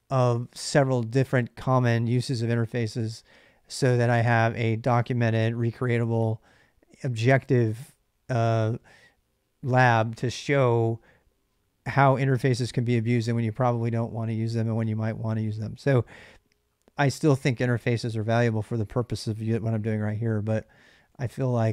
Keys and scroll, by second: 20.3-21.7 typing.